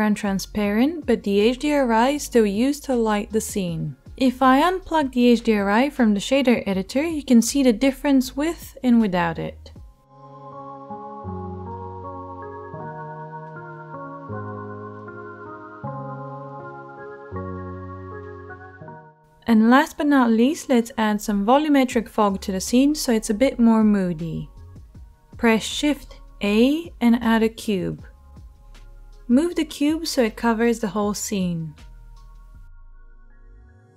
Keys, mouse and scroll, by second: 20.3-29.7 middle drag, 25.9 shift+a, 29.7 g, 33.4-33.9 drag.